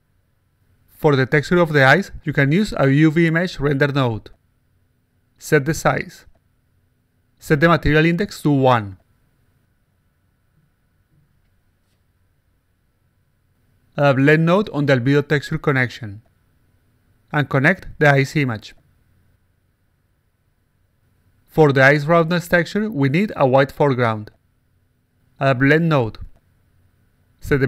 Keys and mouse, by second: 0.2 click, 1.9 click, 2.7-3.5 drag, 5.2 click, 5.7-7.8 typing, 8.5 click, 9.0 click, 9.5 click, 10.1 click, 10.8 click, 11.7 click, 11.8 click, 12.0 alt+click, 13.7 click, 14.3-15.4 drag, 15.9 click, 16.6 click, 17.7 click, 19.4 alt+click, 19.8-20.4 alt+drag, 20.6-21.5 alt+drag, 21.9 click, 22.6-23.7 drag, 25.1 click, 25.8 click, 27.0 click.